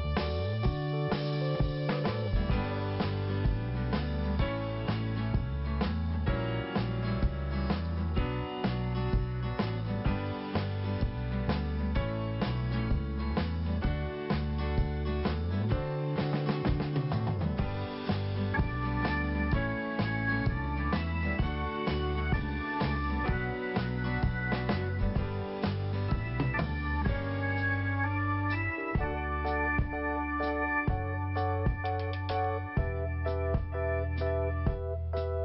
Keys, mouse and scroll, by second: 0.1 scroll down 1, 0.8 scroll up 2, 1.9 right click, 2.9 click, 4.2 click, 4.6 click, 4.7 click, 5.3 click, 6.0 click, 6.1 click, 7.6 click, 7.7 click, 9.4 right click, 9.6 right click, 9.9 right click, 10.0 right click, 10.3 scroll down 2, 11.8 click, 13.2 scroll down 2, 14.3 scroll up 1, 16.3 scroll up 1, 16.4 click, 17.6 scroll down 2, 18.5 scroll up 2, 19.4 right click, 20.1 click, 22.0 click, 22.9 click, 23.2 click, 24.3 click, 25.0 scroll down 1, 25.7 right click, 28.6 scroll down 1, 29.1 scroll up 2, 29.9 right click, 29.9 scroll up 1, 30.0 right click, 30.1 right click, 31.0 click, 32.1 click, 33.3 right click, 33.9-34.4 scroll down 1.